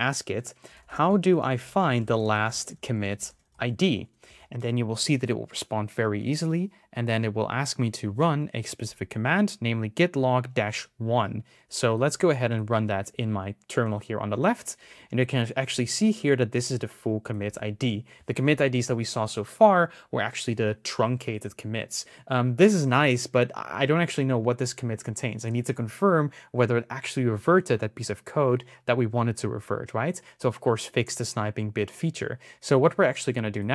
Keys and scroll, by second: 2.9-3.8 typing, 11.8 super+c, 12.9 super+v, 17.2 super+c.